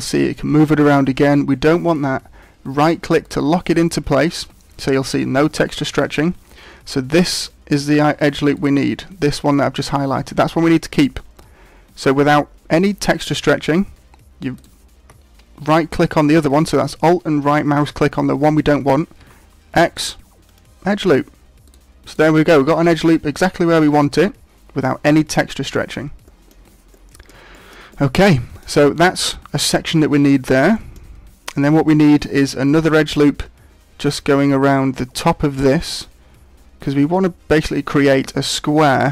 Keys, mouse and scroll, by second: 8.5 alt+right click, 14.5 alt+right click, 19.2 x, 21.6 right click, 22.0 right click, 26.2 shift+middle click, 26.9 middle click, 27.5 shift+middle click, 27.9 middle click, 30.7 shift+middle click, 31.8 shift+middle click.